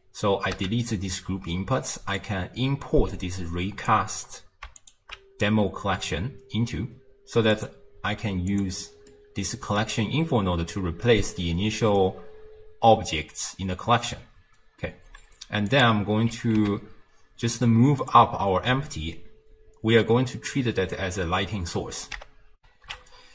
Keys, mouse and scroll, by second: 0.6 x, 2.2 click, 4.8 alt+shift+click, 7.5 click, 8.5 click, 9.1-10.8 middle drag, 10.8-11.1 scroll down 2, 11.1-14.1 middle drag, 15.7 click, 16.3 g, 22.6 n.